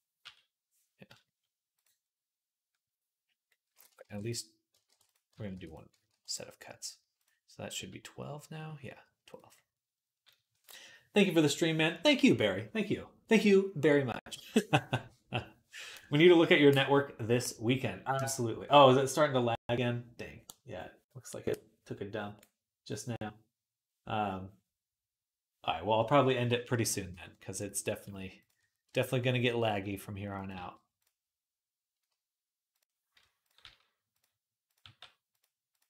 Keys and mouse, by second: 0.0 l, 3.7 ctrl+click, 3.7 ctrl+right click, 3.9 ctrl+r, 4.5 ctrl+click, 4.5 ctrl+right click, 4.7 ctrl+r, 5.1 ctrl+click, 5.1 ctrl+right click, 5.3 ctrl+r, 5.7 ctrl+click, 5.7 ctrl+right click, 5.9 ctrl+r, 7.6 l, 9.1 click, 27.4 click, 28.2 ctrl+click, 28.3-32.6 ctrl+middle drag, 28.7 e, 29.8 r, 30.3 g, 32.6 click, 33.3-34.6 middle drag, 33.4 g, 34.6 g, 35.7 g.